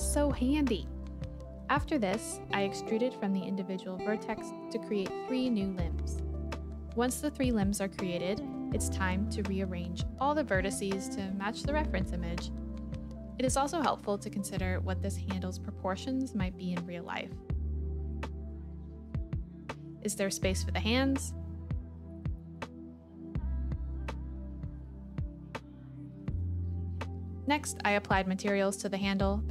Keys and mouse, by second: 0.5 click, 0.6 a, 2.3 shift+Tab, 2.3 shift+click, 3.9-4.9 drag, 5.5 e, 6.9 e, 11.1 click, 12.3 click, 12.8-17.8 typing, 13.4 click, 13.8 click, 14.5 click, 15.8 click, 16.2 click, 16.7 click, 17.1 click, 18.1 click, 18.2 Tab, 18.6 shift+middle click, 19.0 Tab, 19.3-22.2 typing, 19.5 click, 19.8 click, 20.9 click, 21.5 click, 21.8 click, 22.1 click, 22.3 click, 22.9 click, 25.0 click, 26.8 alt+s.